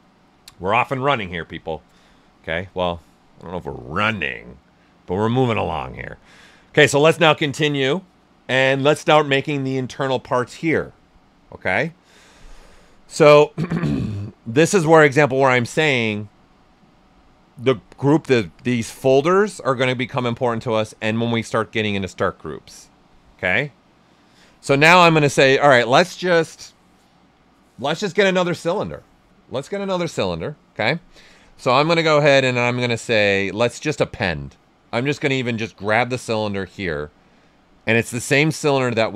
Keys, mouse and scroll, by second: 5.1 alt+right click, 25.3-30.7 drag, 33.9 click, 36.6 click.